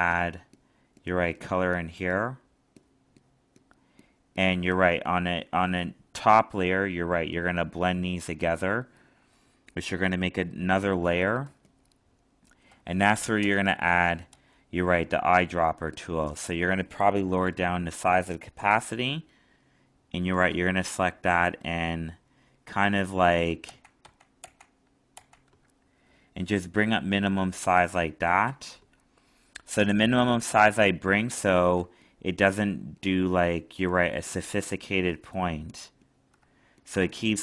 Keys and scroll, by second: 11.4 alt+space, 23.6 ctrl+z.